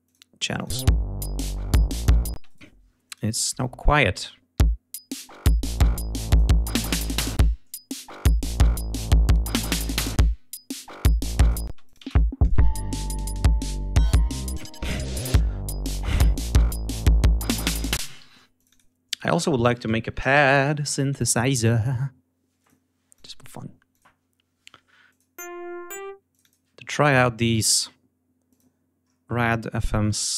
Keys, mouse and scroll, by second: 0.0 click, 0.6 space, 2.2 space, 2.3 right click, 2.9 click, 3.6 click, 4.5 l, 5.1-6.5 drag, 7.1 click, 10.1-11.7 drag, 11.7 space, 11.8 click, 14.3 ctrl+scroll down 2, 14.7 ctrl+scroll up 2, 15.5 ctrl+scroll down 2, 16.2-16.6 scroll up 1, 16.6 click, 17.1 ctrl+scroll up 2, 17.9 space, 18.2 d, 18.5 click, 19.1 click, 19.8-20.8 typing, 22.6 click, 23.1 click, 23.9 click, 25.1 click, 26.3 click, 28.4 click, 29.0-30.1 scroll down 2, 30.1 scroll down 1.